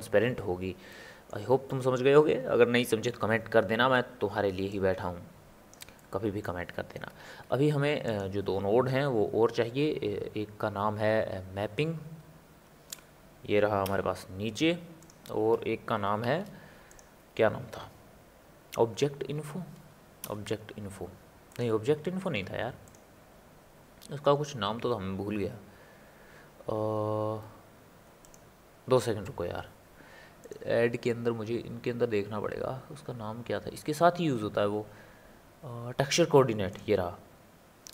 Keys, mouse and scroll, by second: 4.7 click, 6.0-7.2 middle drag, 7.2 shift+a, 16.3 shift+a, 22.3 shift+a, 30.4-33.5 drag.